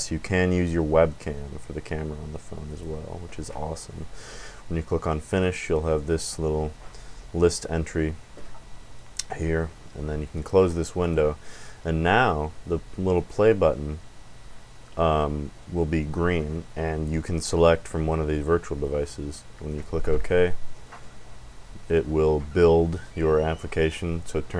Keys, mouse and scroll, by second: 1.0 click, 2.7 click, 10.3 click, 11.0 click, 13.1 click, 19.7 click.